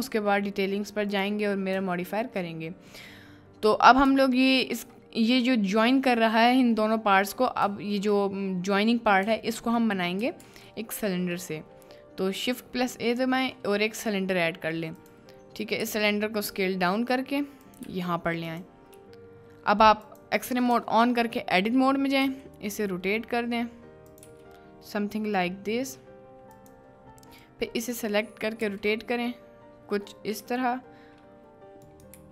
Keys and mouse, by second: 0.0 shift+middle click, 1.1 click, 4.4-4.8 shift+middle drag, 9.5 shift+middle drag, 10.6 shift+a, 15.8 s, 17.9 g, 18.5 click, 20.1 click, 20.9 Tab, 22.2 r, 24.1 click, 24.4 s, 26.6 click, 27.6 click, 28.6 r, 30.4 g, 31.8 click, 32.1 t.